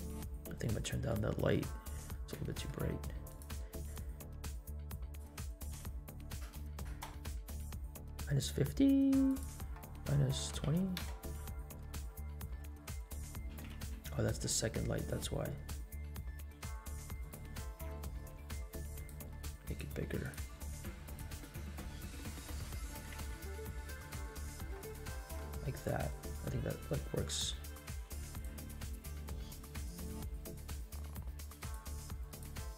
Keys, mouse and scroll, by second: 0.8 middle drag, 1.3 shift+middle drag, 1.7 scroll up 1, 2.1 middle click, 2.5 shift+middle click, 3.2 click, 4.2 click, 5.0-7.1 drag, 9.2-11.3 drag, 12.0 middle click, 12.5 scroll up 1, 13.0 scroll down 1, 13.4 g, 18.1 s, 19.6 click, 21.1 click, 21.7 middle click, 22.2 s, 22.9 g, 26.4 middle click, 28.3 click, 30.4 scroll up 2, 30.8 shift+middle drag, 31.6 click, 32.3 click.